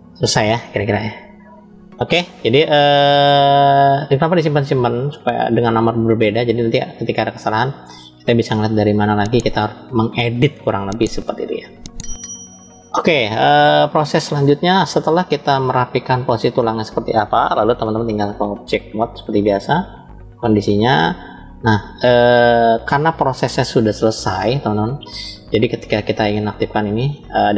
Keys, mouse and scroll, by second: 2.7-6.2 middle drag, 9.3-10.9 middle drag, 13.8-14.8 middle drag, 14.8-15.6 scroll down 3, 15.4-16.5 middle drag, 16.8-17.9 scroll up 1, 19.5-20.3 drag, 20.9 click, 21.6 click, 26.8 click.